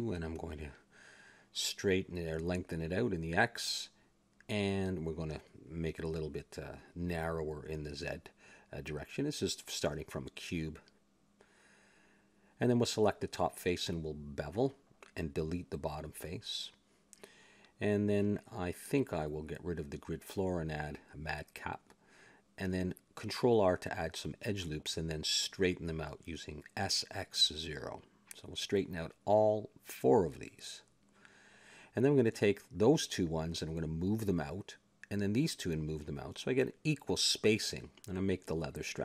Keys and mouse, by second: 0.7 s, 2.9 KP_1, 3.8 click, 4.4 KP_1, 4.9 Tab, 5.7 KP_1, 6.1 KP_5, 6.9 KP_5, 7.4 Tab, 8.4 s, 10.6 KP_7, 11.3-13.0 middle drag, 12.3 a, 13.0 ctrl+Tab, 13.6 click, 14.1 ctrl+b, 15.4 middle click, 15.8 click, 16.2 x, 17.0 middle click, 17.9 n, 19.0-22.2 drag, 22.2 n, 22.9 ctrl+r, 24.7-29.1 typing, 25.0 click, 26.8 click, 28.7 click, 30.6 a, 31.0 click, 31.4 s, 32.5 a, 33.0 click, 33.9 s, 35.2 a, 35.5-36.8 drag, 36.3 s, 38.0 a, 38.2 ctrl+Tab, 38.9 click.